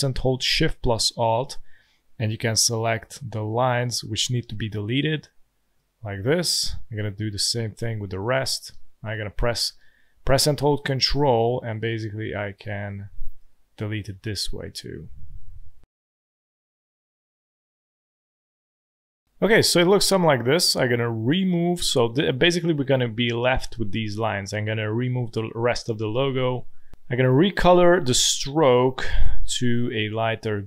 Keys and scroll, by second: 8.7 space, 9.8 space, 10.4 alt+space, 12.9 space, 15.9 space, 17.0 alt+space, 17.2 alt+space, 17.8-19.1 typing, 26.0 Delete.